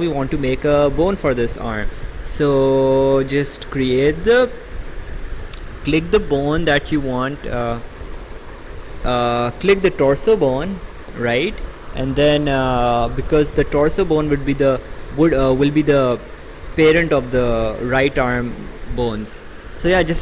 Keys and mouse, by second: 10.0 click.